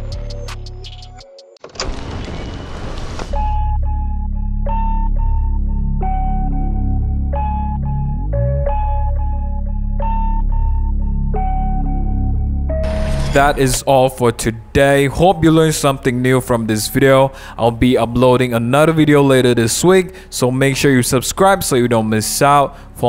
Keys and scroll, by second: 0.0 super+1, 0.5 super+0, 0.6 super+-, 0.7 super+-, 0.7 super+0, 0.8 super+-, 0.9 super+0, 1.1 super+a, 1.5 super+d, 1.6 super+s.